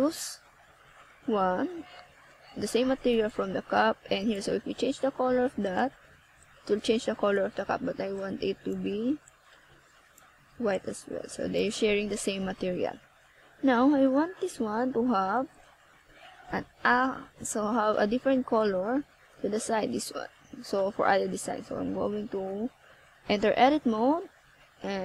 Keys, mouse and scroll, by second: 0.4 z, 3.7 click, 6.3 click, 6.7 click, 9.2-9.5 ctrl+scroll up 2, 15.2 click.